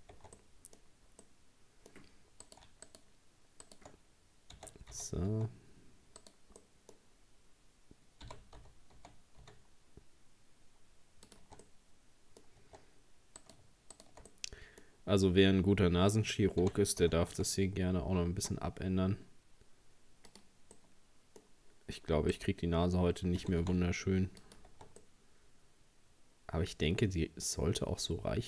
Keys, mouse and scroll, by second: 0.2 Tab, 0.4 middle click, 0.8-1.2 scroll up 2, 1.2-2.5 middle drag, 2.5 right click, 2.9 shift+right click, 3.7 shift+right click, 4.6 r, 6.6-8.3 middle drag, 8.3 g, 11.4 Tab, 11.7 middle click, 12.6 Tab, 13.4 right click, 14.0 shift+right click, 14.3-16.6 middle drag, 16.6 g, 20.8-22.4 middle drag, 22.4 right click, 23.4 g, 24.7 Tab, 25.0-28.0 middle drag.